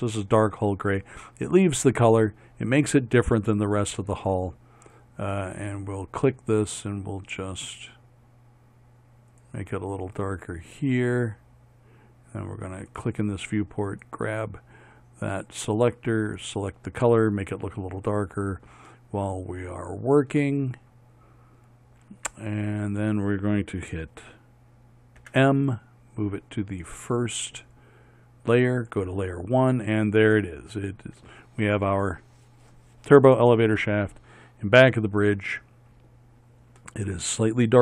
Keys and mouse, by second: 25.3 m, 28.9-32.2 drag.